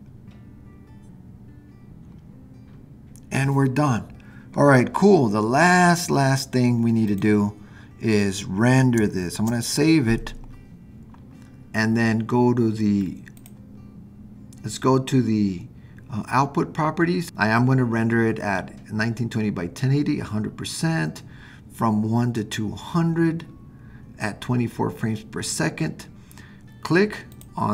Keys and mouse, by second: 7.1 click, 9.4 super+s, 27.3 click.